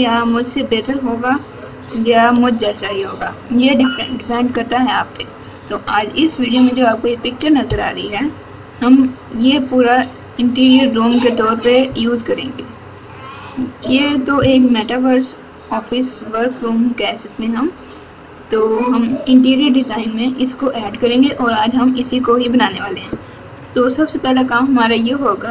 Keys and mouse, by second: 1.6 w.